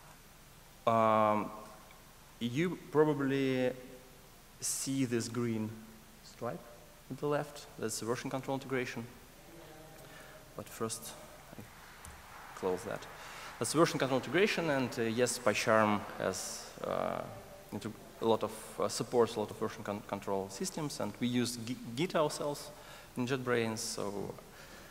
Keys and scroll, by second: 10.6 ctrl+shift+super+a.